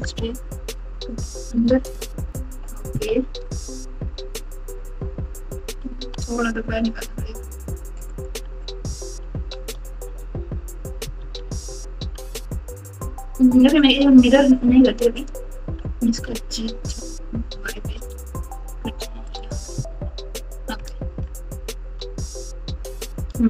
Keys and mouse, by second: 3.0 KP_7, 5.9 g, 9.3 KP_3, 9.9 KP_9, 11.1 KP_8, 11.3 KP_8, 11.5 KP_8, 11.6 KP_8, 15.1 click, 16.2 g, 19.9 KP_7, 20.7 KP_Add, 21.1 KP_Add, 21.2 KP_Add, 21.2 KP_Add, 22.5 Tab, 22.8 Tab.